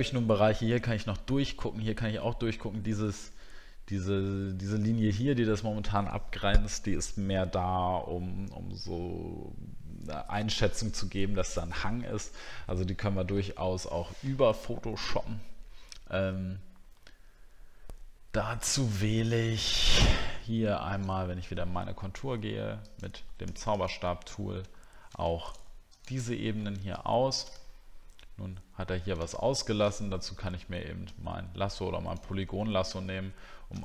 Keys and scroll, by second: 24.7 alt+scroll up 1, 27.6 alt+scroll up 7.